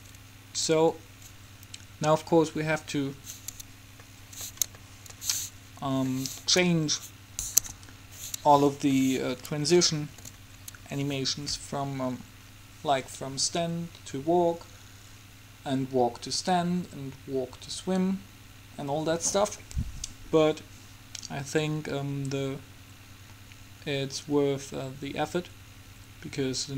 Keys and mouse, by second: 4.2 middle click, 6.0 Escape, 7.8 KP_3, 20.7-26.7 middle drag.